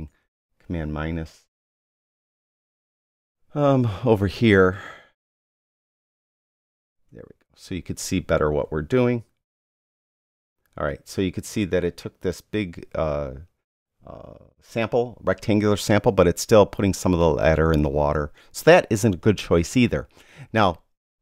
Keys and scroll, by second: 6.0 super+-, 9.6 super+-.